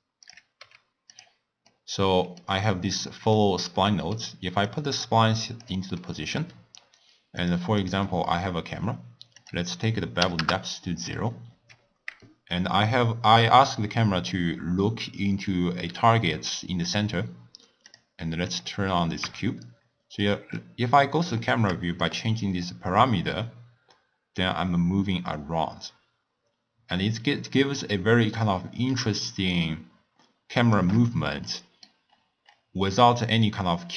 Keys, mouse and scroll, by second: 0.6 g, 1.7-3.4 middle drag, 3.4-3.9 scroll up 2, 3.9-4.6 middle drag, 4.6 click, 5.9-7.4 middle drag, 7.4 drag, 7.7 click, 9.4-12.4 drag, 17.9 drag, 18.4 click, 19.2 KP_0, 20.1-22.0 scroll up 4, 22.0-24.9 shift+drag, 31.4-32.0 middle drag, 32.0-33.4 scroll down 6, 33.4-33.9 middle drag.